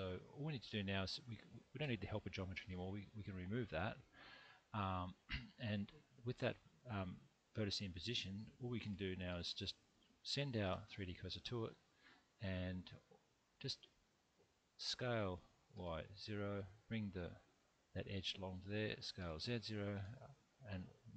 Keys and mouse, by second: 0.5 click, 2.7 x, 6.1 click, 6.7-8.5 middle drag, 10.6 shift+/, 14.8 s, 15.7 y, 16.1 0, 16.7 click, 19.2 s, 19.4 z, 19.9 0, 20.3 click.